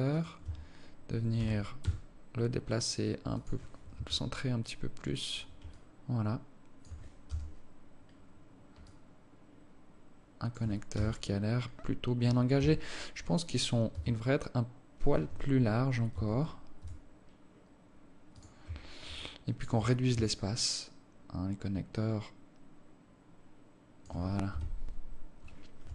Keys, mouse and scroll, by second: 0.7 Tab, 1.6 g, 4.2 KP_1, 6.0 alt+click, 7.6 KP_0, 9.1 alt+click, 11.2 KP_0, 12.8 KP_1, 14.2 s, 16.0 scroll up 2, 16.2 scroll down 1, 16.4 Tab, 17.0 s, 19.0 Tab, 19.4 alt+click, 20.8 shift+click, 24.7 KP_1.